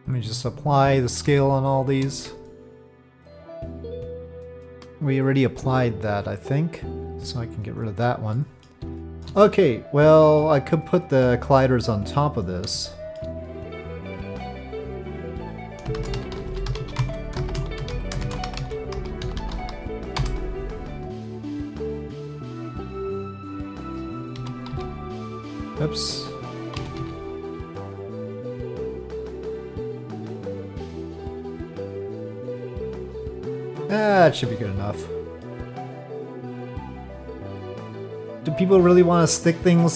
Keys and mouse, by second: 0.2 click, 7.0-7.7 drag, 8.3-8.6 middle drag, 9.0 shift+middle drag, 9.5-10.4 middle drag, 11.5-12.1 middle drag, 12.8-13.2 shift+middle drag, 13.4 middle click, 13.6 Tab, 14.3 Tab, 15.1-20.6 drag, 16.4 l, 19.4 0, 21.3-22.8 drag, 23.1 middle click, 24.3 s, 26.8 s, 30.4-31.6 drag, 32.3-34.0 middle drag, 34.2 Tab, 35.0 middle click, 36.5-37.8 middle drag.